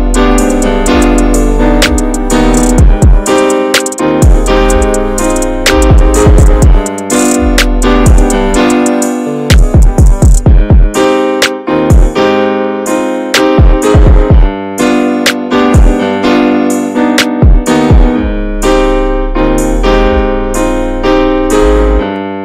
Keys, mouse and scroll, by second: 0.4 middle click, 0.8 ctrl+click, 1.5-4.5 right drag, 4.5 a, 5.1 a, 5.2-6.4 right drag, 6.4-7.0 scroll down 3, 7.0 middle click, 7.7 scroll up 1, 7.9-9.4 middle drag, 9.4 click, 10.3 alt+shift+click, 10.8 alt+shift+click, 11.2-12.4 middle drag, 12.4 alt+shift+click, 12.7 middle click, 13.0-14.0 scroll up 3, 13.2 shift+middle click, 14.0-15.2 ctrl+drag, 15.2-16.8 right drag, 16.8 a, 17.2 a, 17.4-18.6 right drag, 18.6 scroll down 3, 19.0-21.7 shift+middle drag, 21.7 scroll up 1, 21.9-22.4 middle drag.